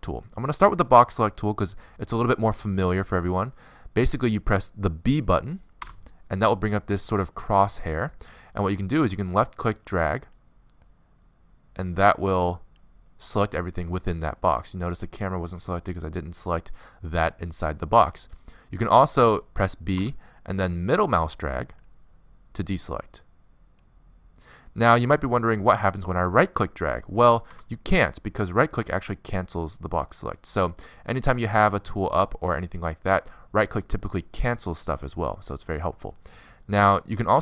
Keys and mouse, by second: 0.3 b, 5.1 b, 8.7 middle click, 10.7 middle click, 20.2 b, 35.4 a.